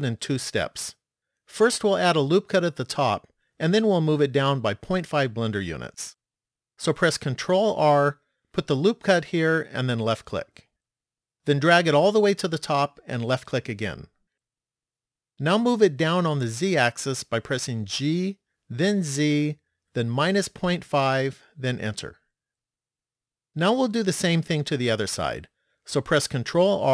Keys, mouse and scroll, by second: 8.0 ctrl+r, 18.2 g, 26.5 ctrl+r.